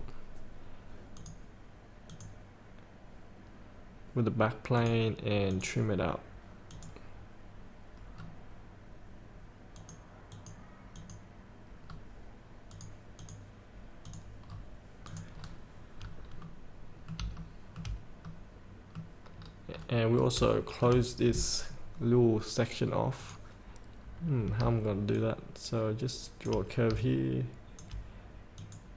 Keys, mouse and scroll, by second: 1.4 click, 8.3 scroll down 1, 10.0 click, 10.8 click, 12.1 scroll up 1, 12.9 click, 14.7 scroll up 1, 15.2 click, 15.6 scroll up 1, 16.6 middle click, 16.9 middle click, 17.7 shift+middle click, 18.5 middle click, 19.5 scroll down 1, 20.5 scroll down 1, 20.8 shift+middle click, 23.4 click, 25.4 shift+click, 27.2 shift+click, 28.8 click.